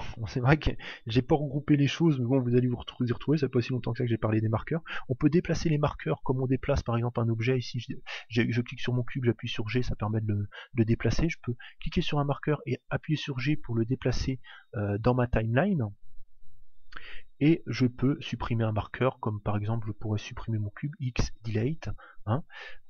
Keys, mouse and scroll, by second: 6.2-9.0 right drag, 9.0 g, 20.4 x.